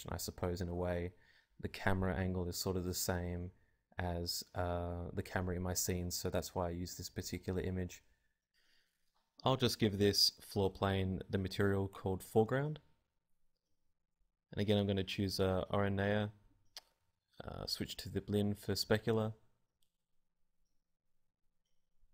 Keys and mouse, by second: 0.0 z, 1.9 KP_0, 2.5 click, 3.3-17.3 drag, 18.7-22.1 drag.